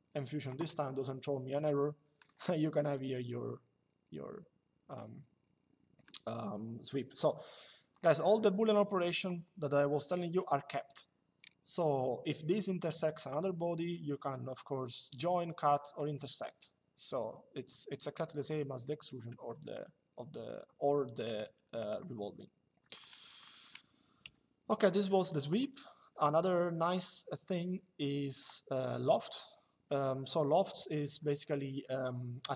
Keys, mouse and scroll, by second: 1.4 shift+click, 3.0 click, 8.7 click, 20.7 Escape, 22.7 click, 23.9 Delete, 24.9 click.